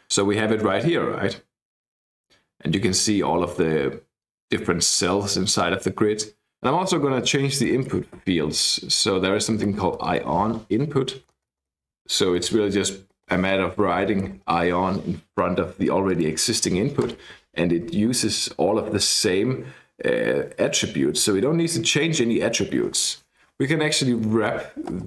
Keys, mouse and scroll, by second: 0.1 click, 7.5-10.7 typing, 11.2 Down, 11.3 Left, 11.5 Left, 12.2 Left, 12.9 Left, 13.2 Right, 13.5-14.8 typing, 14.9 Escape, 16.1 click, 17.1 KP_Enter, 23.6-25.0 typing.